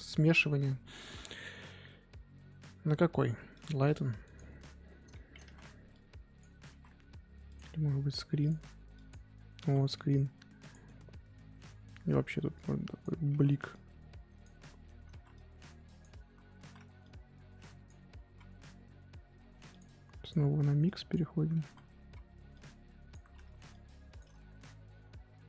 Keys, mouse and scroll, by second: 3.6-4.9 drag, 4.9 scroll up 2, 5.1 scroll down 1, 5.4 ctrl+z, 5.9 click, 6.7 ctrl+z, 8.4 click, 9.4 scroll up 1, 9.6 ctrl+z, 10.2 f, 10.7 middle click, 10.9-12.5 scroll up 1, 12.5 click, 13.3 ctrl+z, 13.7-15.2 drag, 15.2 ctrl+z, 15.3-16.6 drag, 16.6 ctrl+z, 17.0-18.7 drag, 18.7 x, 20.3-21.6 drag, 21.6 ctrl+z, 22.5-24.3 drag, 24.3 ctrl+z.